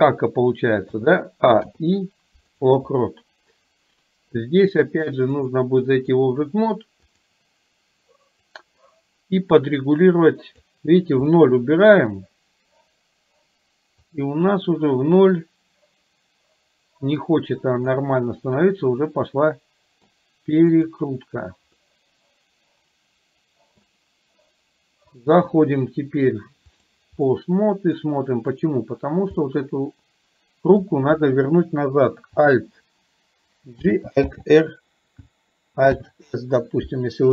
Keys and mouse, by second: 0.9 a, 1.7 i, 5.4 click, 8.5-10.8 drag, 11.4-12.3 middle drag, 14.2-18.0 drag, 19.2-20.2 middle drag, 20.8 click, 21.8-23.9 middle drag, 25.2-27.0 drag, 27.4-27.9 middle drag, 29.5-30.9 middle drag, 33.9 alt+g, 34.4 alt+r.